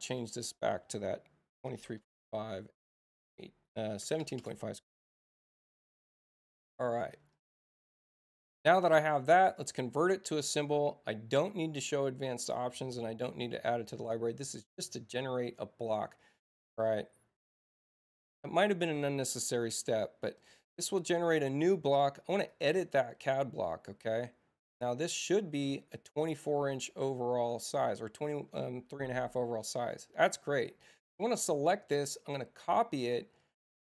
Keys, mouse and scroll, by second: 0.1 click, 2.1 Tab, 4.0 BackSpace, 4.3 BackSpace, 5.6 Tab, 6.9 click, 9.9 click, 12.7 click, 14.1 click, 16.7 click, 19.8 right click, 22.4 click, 25.9 click, 29.5 click, 31.7 c, 33.0 click.